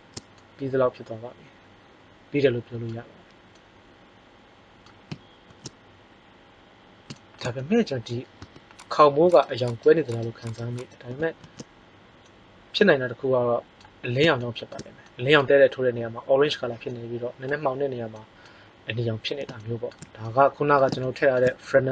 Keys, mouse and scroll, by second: 5.8 shift+z, 8.3 Tab, 11.4 shift+z.